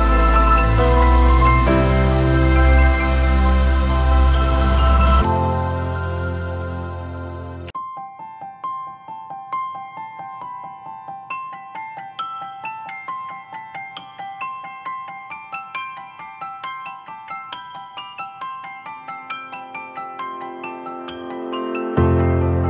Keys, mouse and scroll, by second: 2.8 Up, 3.8 ctrl+t, 4.5 alt+shift+click, 17.7-20.1 scroll down 1.